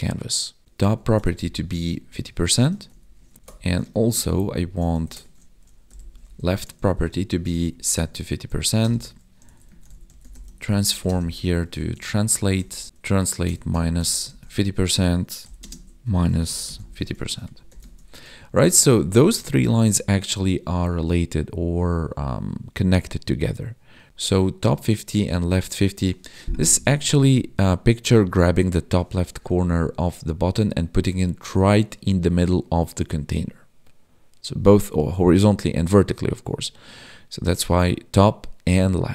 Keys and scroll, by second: 0.6 space, 3.4 Left, 3.4 alt+shift+Down, 4.0 ctrl+s, 4.2 ctrl+Left, 5.1 ctrl+shift+Right, 6.8 ctrl+s, 7.1 Escape, 7.6 ctrl+Right, 11.1 space, 15.7 space, 17.3 ctrl+s, 17.5 Right, 17.9 ctrl+s.